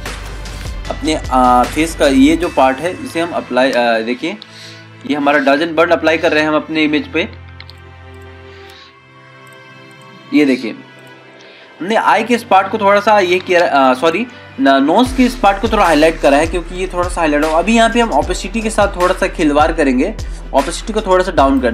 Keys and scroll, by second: 3.4 ctrl+0, 4.7 ctrl+-.